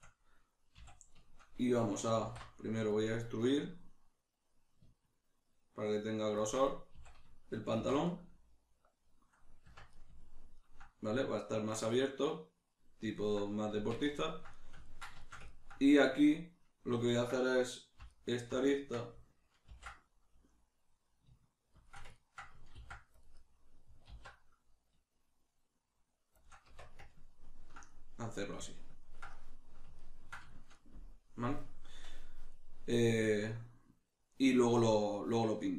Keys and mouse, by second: 0.8 a, 2.2 alt+e, 6.4 shift+click, 6.6-13.1 middle drag, 7.0 a, 7.8 shift+n, 9.6 Tab, 13.7 Tab, 14.1 ctrl+middle click, 18.1 alt+right click, 18.7-19.7 ctrl+middle drag, 19.7 ctrl+b, 21.9 shift+click, 22.2 ctrl+middle click, 22.7 ctrl+r, 23.4 right click, 24.1 alt+s, 26.4 shift+click, 26.7 Tab, 27.1-35.7 ctrl+middle drag.